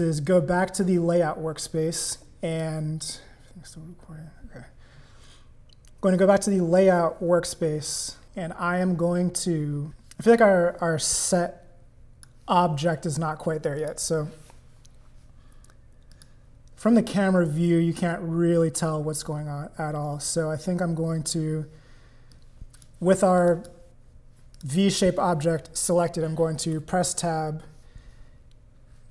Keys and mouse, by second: 1.9 click, 8.2 click, 10.8-12.3 drag, 13.8 click, 16.1 click, 22.3 click, 23.4 click, 24.5 click, 26.7 Tab, 27.8 middle click.